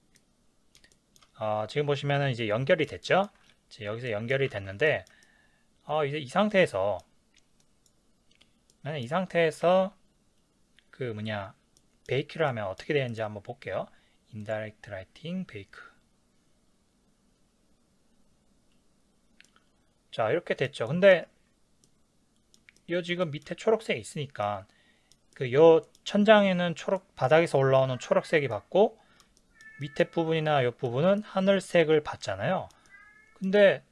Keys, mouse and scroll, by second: 0.2-7.6 middle drag, 4.5 ctrl+s, 7.6 click, 8.8-15.0 middle drag, 15.0-19.4 drag, 19.4-33.9 middle drag.